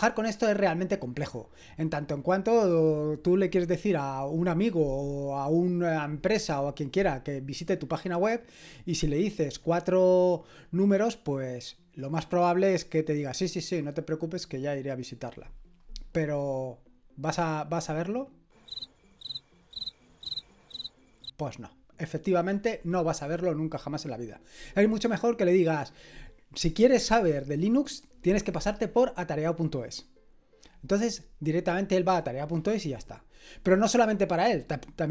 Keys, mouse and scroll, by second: 18.1 click, 21.1 click.